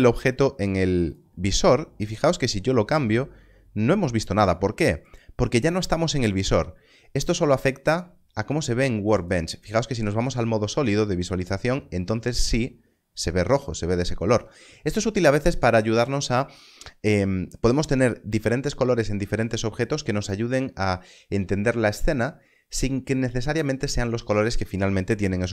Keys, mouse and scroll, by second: 2.2 click, 9.1 click.